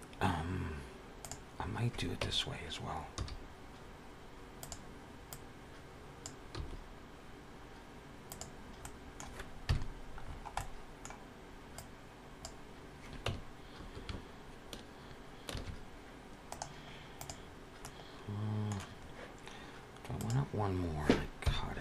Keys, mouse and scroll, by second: 2.3 Tab, 3.0 s, 5.5 click, 6.4 s, 8.6 middle click, 9.5 KP_Decimal, 10.1-10.5 scroll down 7, 10.4 middle click, 11.6 click, 13.1 Tab, 15.9 ctrl+1, 16.3 right click, 17.6 middle click, 20.0 click, 21.3 KP_1.